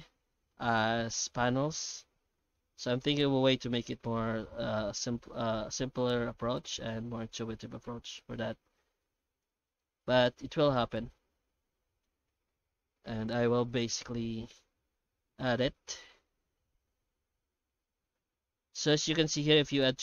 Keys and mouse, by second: 0.3 middle click, 2.2 ctrl+shift+middle click, 2.8 middle click, 3.8 F9, 9.8-12.0 middle drag, 12.4-14.6 middle drag, 15.7 F9.